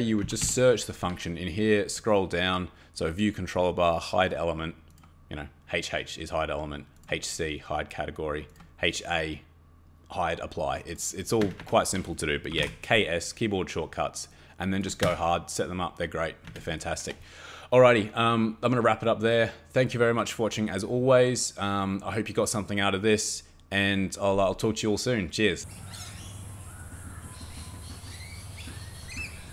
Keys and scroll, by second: 0.0-0.9 typing, 11.4 Escape, 11.6 Escape, 12.3-13.1 typing, 15.0 Escape, 16.5 Escape.